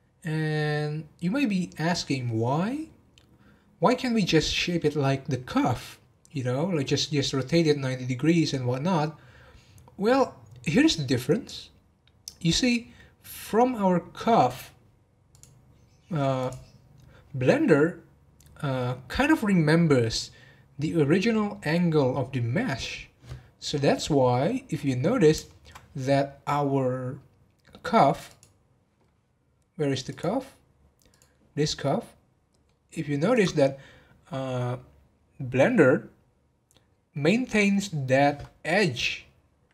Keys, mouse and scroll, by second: 24.3 scroll down 1, 25.0-25.4 scroll down 10, 25.4 shift+middle click, 26.1-26.5 scroll down 1, 28.2 click, 29.0-30.1 scroll up 1, 30.1 click, 31.1 click, 31.4 scroll up 1, 31.7-32.8 middle drag, 32.8-33.3 scroll up 1, 33.3 click, 36.7-37.2 scroll up 1, 37.2-39.7 scroll up 1.